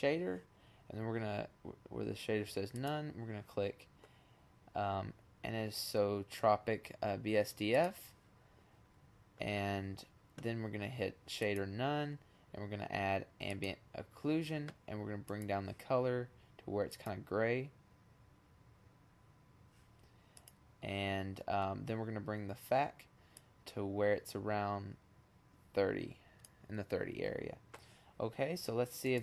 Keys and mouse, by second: 0.3-2.5 drag, 8.4-9.1 middle drag, 9.1 click, 9.5-10.0 middle drag, 10.0-11.1 drag, 12.8-14.7 drag, 18.1-19.8 drag, 19.8 middle click, 21.1 click, 26.5-27.8 drag.